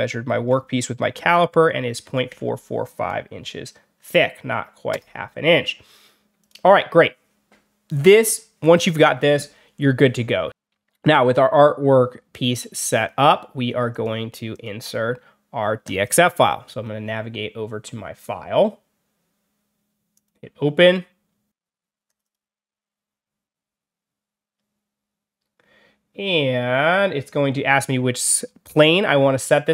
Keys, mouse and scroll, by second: 0.9 4, 1.9 5, 2.2 5, 4.8 Return, 6.3 click, 12.8 click, 13.8 click, 14.4 click, 15.7 click, 20.0 click, 22.0 click, 22.1 click.